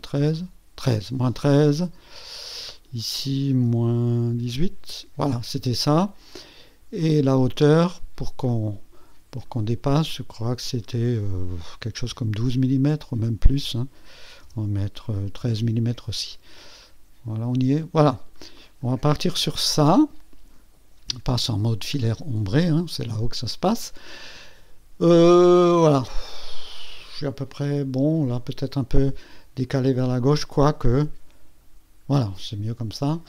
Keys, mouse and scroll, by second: 0.2 KP_3, 2.7 click, 3.6 KP_Subtract, 4.3 KP_1, 4.5 KP_8, 7.0 click, 8.5 click, 10.6 click, 11.9 KP_1, 12.1 KP_2, 12.7 KP_2, 14.4 BackSpace, 15.4 KP_3, 16.8-18.5 drag, 18.5-19.0 drag, 19.2 KP_2, 30.3 click, 31.0 scroll down 2, 32.9 click.